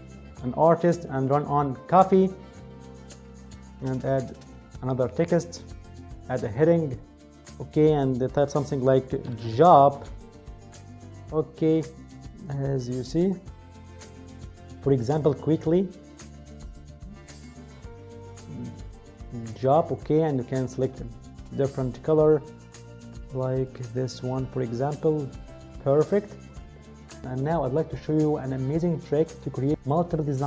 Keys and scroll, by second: 8.9-9.9 typing.